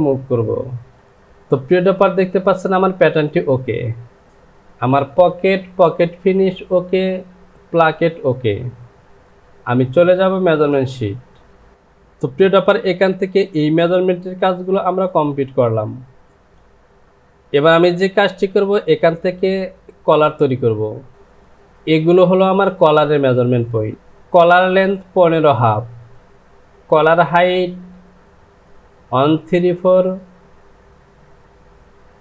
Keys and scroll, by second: 1.2 j.